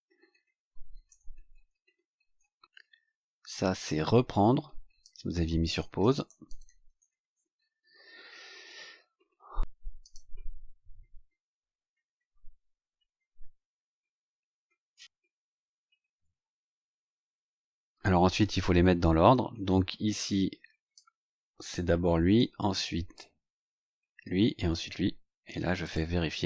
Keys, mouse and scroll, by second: 0.0-1.0 typing, 3.4-5.1 drag, 5.5-7.4 typing, 8.2-9.5 scroll down 3, 9.9 click, 20.9 click, 22.3 click, 25.8 click.